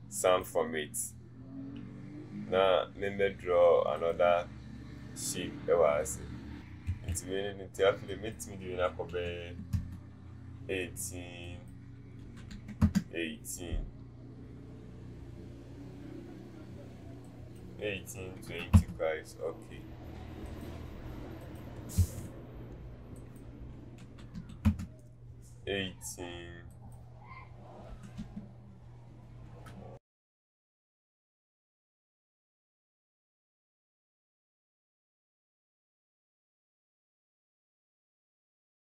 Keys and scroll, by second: 6.9 ctrl+a, 9.4 KP_8, 18.3 KP_2, 18.5 KP_0, 22.0 ctrl+a, 28.4 KP_Divide, 32.6 ctrl+z, 35.5 KP_1, 36.0 Return, 36.4 KP_1, 36.6 Return.